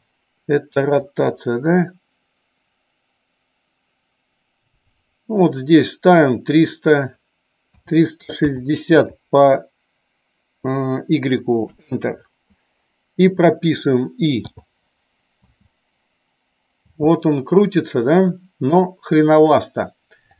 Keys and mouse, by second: 1.3-6.3 drag, 7.0-12.1 drag.